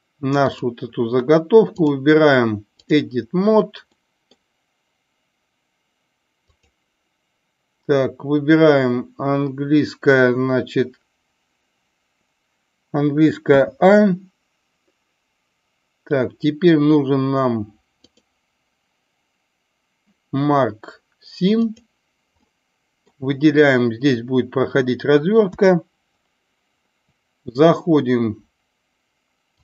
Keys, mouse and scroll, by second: 0.4 click, 1.8-2.9 drag, 3.9 middle click, 6.4 click, 18.1-21.8 drag, 22.4 middle click, 25.4 KP_7.